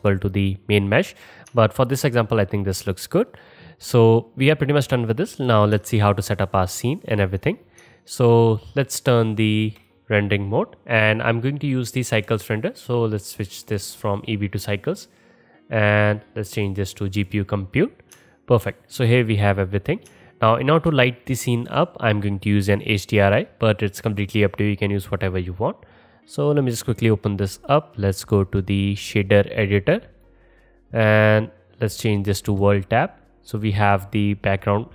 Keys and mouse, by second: 11.3-13.8 middle drag, 13.8-28.0 drag, 30.3-34.8 drag, 34.8 middle click.